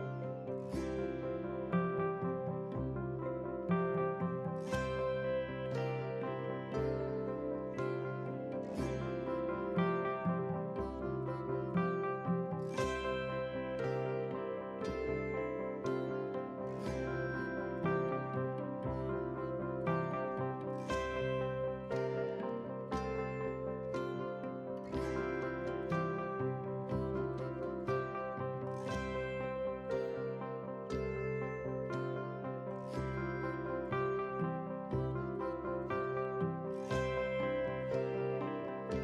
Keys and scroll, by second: 3.6 ctrl+a, 4.5 ctrl+c, 5.7 ctrl+c, 6.9 ctrl+v, 10.6 ctrl+t, 27.8 ctrl+t, 29.2 ctrl+t.